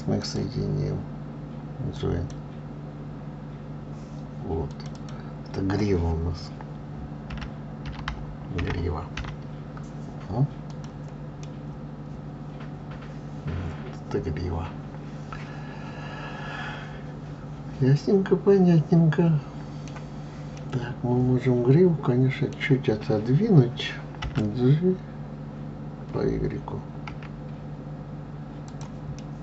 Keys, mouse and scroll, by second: 0.5-3.5 drag, 5.0 click, 5.3-8.3 drag, 11.7-14.7 middle drag, 17.0 middle drag, 20.9-23.9 middle drag.